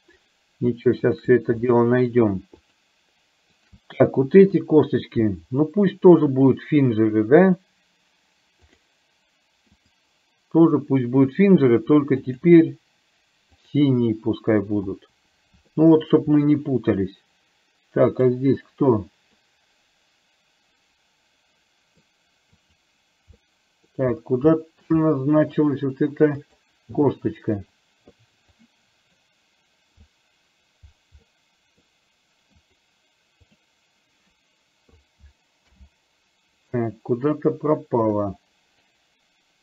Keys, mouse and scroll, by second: 1.3 shift+drag, 1.8-2.1 shift+middle drag, 2.8 shift+click, 3.8 shift+drag, 6.5-9.0 drag, 12.4 click, 15.8-16.1 shift+middle drag, 18.3 click, 19.6-22.1 middle drag, 22.6 click, 23.5-23.9 middle drag, 24.6 shift+middle drag, 25.1-25.6 middle drag, 26.4 click, 28.6 drag, 29.0 click, 30.3 drag, 31.4-31.9 middle drag, 32.6 click, 33.6 click, 38.4-39.0 drag.